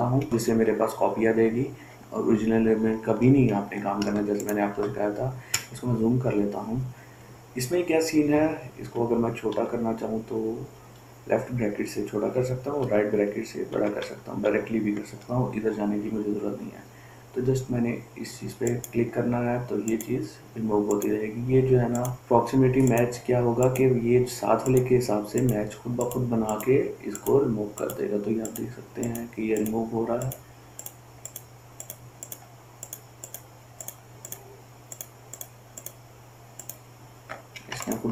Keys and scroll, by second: 4.6 ctrl+space, 5.0 ctrl+space, 5.2 ctrl+space, 5.2 ctrl+space, 5.7 ctrl+space, 9.3 [, 9.9 [, 13.2-14.8 typing.